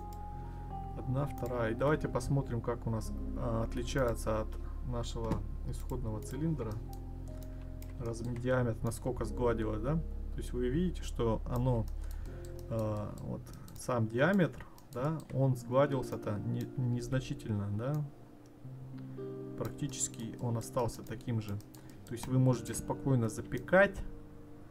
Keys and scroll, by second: 16.9 ctrl+z.